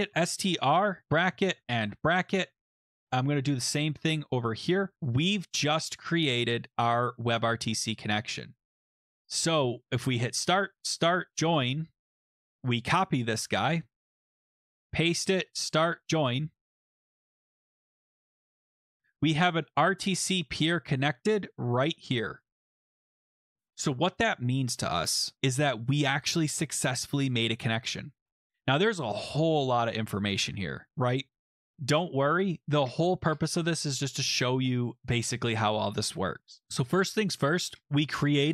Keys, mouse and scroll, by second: 0.0-3.1 typing, 3.6 click, 4.1 ctrl+c, 5.1 click, 5.2 ctrl+v, 7.1 click, 8.6 click, 9.0 click, 9.6 click, 9.9 click, 10.7 click, 11.3 click, 12.0 click, 12.3 click, 12.3 click, 12.5 click, 12.7 click, 13.2 ctrl+c, 14.5 click, 14.8 click, 14.8 ctrl+v, 15.6 click, 16.0 click, 17.5 click, 17.5-18.1 scroll, 21.3 click, 23.4 click, 25.3-26.5 scroll, 26.5-27.5 scroll, 27.5-28.6 scroll, 29.2-30.9 scroll, 31.9-33.2 scroll, 33.2-34.2 scroll, 35.0-36.6 scroll, 36.6 scroll.